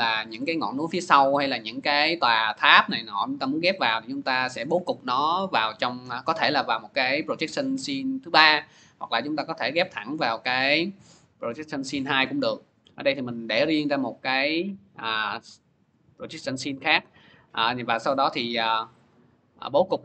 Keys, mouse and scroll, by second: 0.2 scroll, 3.6-5.2 middle drag, 9.1-10.4 drag, 13.0 click, 17.7 click, 18.9-20.0 drag.